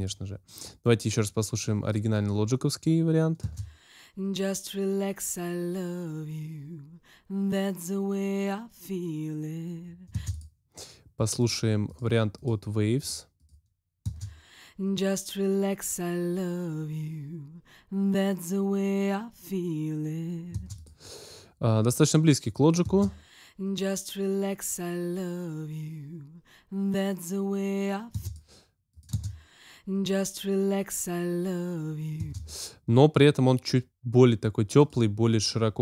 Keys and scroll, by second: 3.4 space, 10.1 space, 14.0 space, 20.5 space, 22.8 space, 28.1 space, 32.1 space.